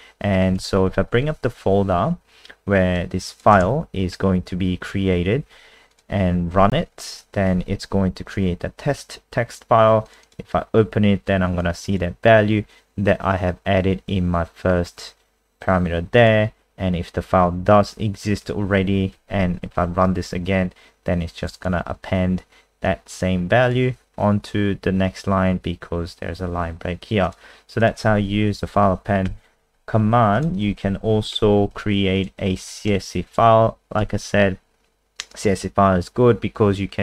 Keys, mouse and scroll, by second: 0.6 ctrl+s, 0.9 F3, 2.5 click, 6.5 F5, 10.0 click, 10.2 click, 11.6 click, 19.1 F5, 21.4 click, 21.5 click, 22.8 click, 28.4 End, 28.5 Home, 30.3 click, 31.0 End, 31.2 shift+Home, 31.7 ctrl+c, 32.2 click, 32.8 shift+Home, 34.0 ctrl+v.